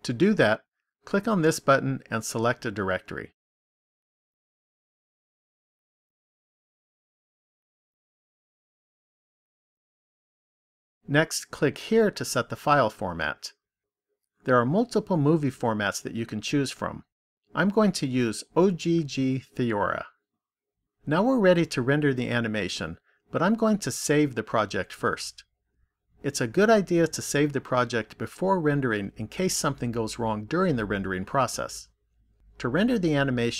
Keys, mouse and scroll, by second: 1.3 click, 9.2 click, 13.4 click, 25.3 click, 33.3 click.